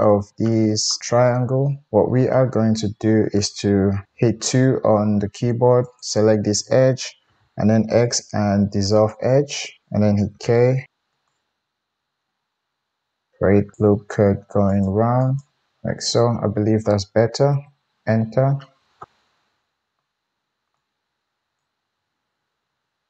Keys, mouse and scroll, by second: 4.1 2, 5.8 middle click, 5.8 right click, 7.2 x, 10.3-19.0 right drag, 10.3 k, 19.0-20.8 middle drag, 20.8-23.0 drag, 22.4 g.